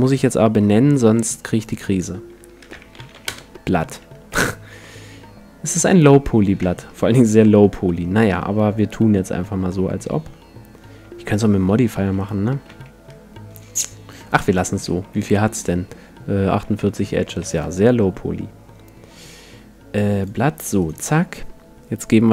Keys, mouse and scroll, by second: 1.7-3.4 drag, 3.1 t, 4.3 n, 4.8-6.1 middle drag, 6.5 middle click, 6.6 Tab, 7.3-9.1 middle drag, 8.3 Tab, 9.5 Tab, 12.2-13.9 right drag, 12.7 x, 14.3-15.9 drag, 14.7 a, 15.0 a, 16.1 click, 16.7 Tab, 17.5 Tab, 20.2-22.0 drag, 20.8-22.3 right drag.